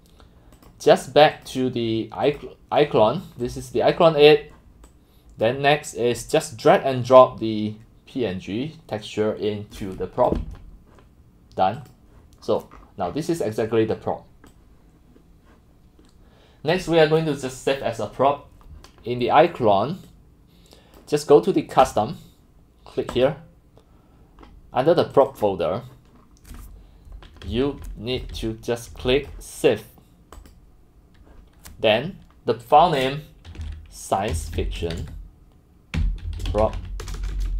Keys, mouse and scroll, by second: 0.3-1.0 drag, 2.6 click, 2.8 click, 3.4 click, 4.2 click, 4.8 click, 5.0-5.4 drag, 5.8 click, 6.8-7.1 drag, 10.3-11.7 drag, 11.9 click, 12.5-13.2 scroll, 14.0 scroll, 14.1 middle click, 14.5-16.9 drag, 20.0 click, 21.8 click, 23.3 click, 25.4 click, 26.3 scroll, 26.6 middle click, 27.5-29.5 typing, 27.6 click, 29.3 click, 30.4 middle click, 33.6-37.5 typing.